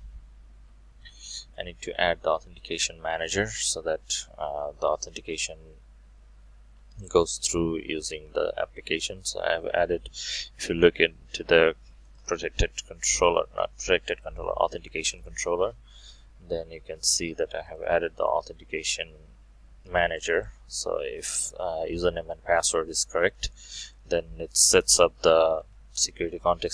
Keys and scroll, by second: 1.1 ctrl+v, 20.4 ctrl+shift+F12.